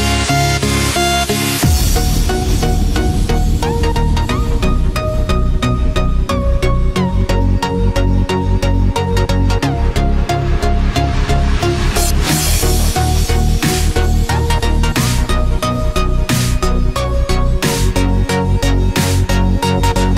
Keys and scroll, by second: 1.2 ctrl+=, 1.7 ctrl+space, 2.0 ctrl+=, 11.5 ctrl+f, 12.0 ctrl+d, 18.2 ctrl+f, 18.4 ctrl+d, 19.0 ctrl+z.